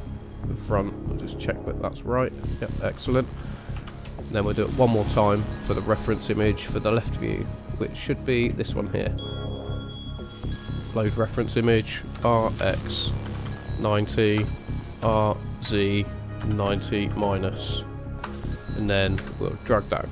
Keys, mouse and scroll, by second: 0.3 click, 0.9 middle click, 3.8 shift+a, 12.1 r, 15.0 r, 19.1 KP_1.